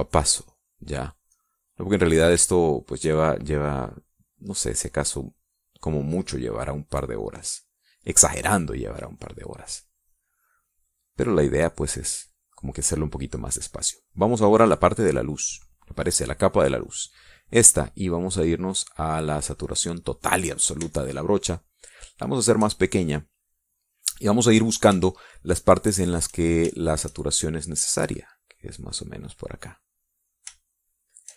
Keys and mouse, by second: 0.5 click, 1.0 click, 1.4 click, 1.9 click, 2.2 click, 3.3 shift+click, 4.7 click, 5.4 click, 6.7 click, 7.7 click, 8.6 click, 10.2 click, 10.6 middle click, 11.2 middle click, 11.5 middle click, 12.1 click, 17.6 click, 19.1-21.0 drag, 21.3 middle click, 21.8-23.7 shift+drag, 23.8 shift+click, 24.0 middle click, 24.0 click, 24.4 middle click, 24.6 click, 25.0 click, 25.9-27.3 shift+drag, 27.6 shift+click, 28.3-31.3 shift+drag.